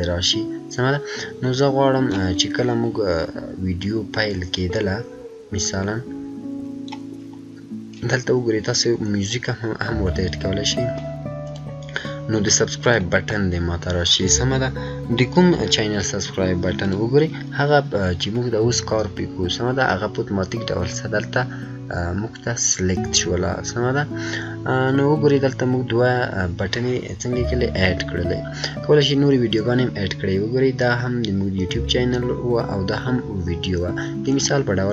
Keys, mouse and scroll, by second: 4.2-9.2 drag, 9.2-11.4 scroll up 1, 11.4 click, 16.8 click, 16.8 click, 19.0 scroll down 1, 20.9 scroll up 1, 23.1 scroll down 1, 28.9 scroll up 1, 34.2 scroll up 1, 34.3 click.